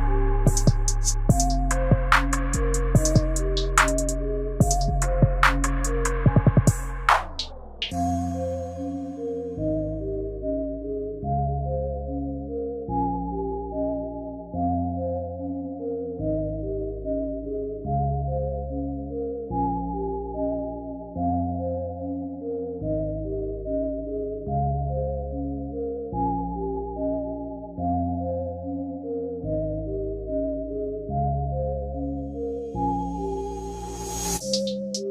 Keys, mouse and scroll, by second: 5.4 click, 5.8 click, 6.5 click, 8.0 g, 18.3 click, 19.7 click, 34.7 click.